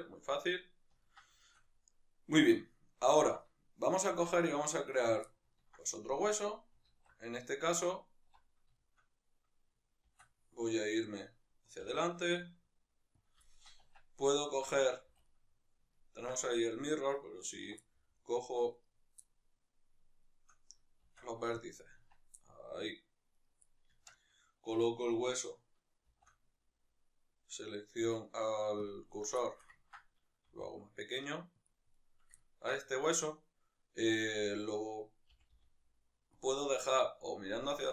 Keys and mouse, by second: 3.5 Tab, 5.0 right click, 5.3-13.3 ctrl+middle drag, 7.1 alt+q, 10.1 shift+d, 13.3 click, 13.5-14.2 shift+middle drag, 14.1 Tab, 14.2 right click, 14.7 Tab, 15.3-17.0 middle drag, 17.0 right click, 17.7 1, 17.9-18.7 middle drag, 18.7 right click, 19.3-20.2 middle drag, 20.2-21.6 shift+right drag, 21.6 shift+s, 22.1 Tab, 22.4-23.3 middle drag, 23.3-23.6 right drag, 23.6-24.8 middle drag, 23.9 Tab, 24.8-29.0 right drag, 29.0 shift+s, 29.5-32.0 shift+middle drag, 30.5 s, 32.0-32.4 right drag, 32.4-34.5 ctrl+middle drag, 34.5 right click, 35.3 g, 36.5 click.